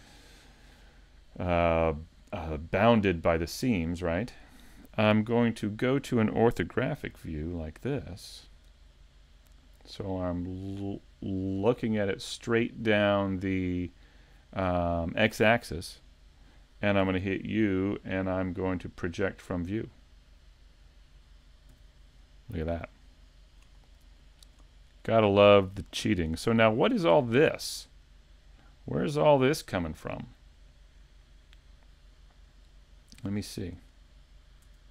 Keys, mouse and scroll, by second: 9.6 shift+middle click, 9.6-10.3 scroll up 3, 25.3 scroll down 2, 26.4 shift+middle click, 26.4 right click, 26.4 scroll up 4, 29.0 right click, 33.2 Tab, 34.6 Tab.